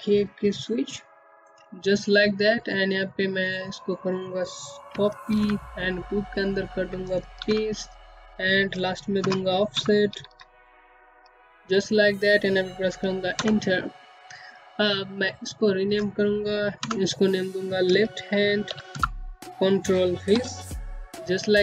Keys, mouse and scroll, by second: 3.2 ctrl+c, 4.1 click, 5.4 ctrl+v, 6.9-10.4 typing, 13.1 click, 14.7 BackSpace, 16.6 typing, 18.9-21.0 typing, 21.0 Return.